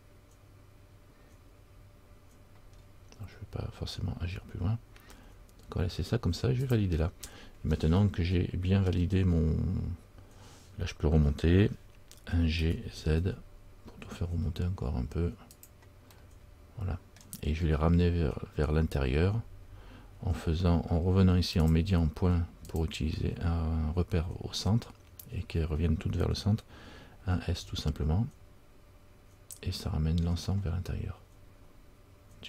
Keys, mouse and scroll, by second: 7.9 middle click, 7.9-9.0 scroll up 1, 16.3 middle click, 19.8 scroll down 1, 21.8 click.